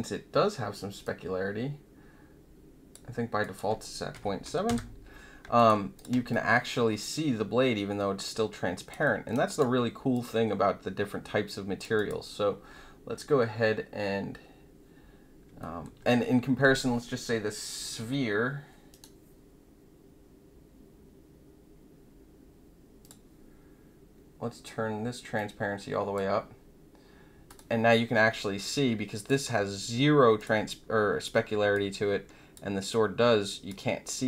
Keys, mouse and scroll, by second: 1.0-2.9 drag, 3.4 click, 5.5 alt+click, 5.9 click, 6.2-8.9 alt+drag, 9.0 alt+middle click, 9.3 alt+right click, 10.1-11.8 alt+drag, 11.9 click, 15.6 alt+middle click, 23.0 click, 25.3-26.1 drag, 27.4 click, 29.1 click, 30.3 click, 31.7 alt+click, 32.8 alt+click.